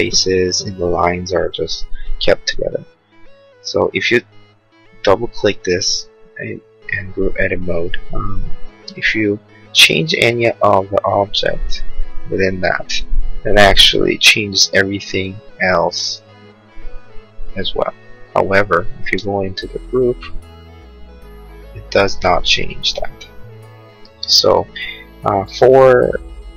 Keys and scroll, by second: 9.7 p, 17.6 Escape, 19.0 space, 20.8 p.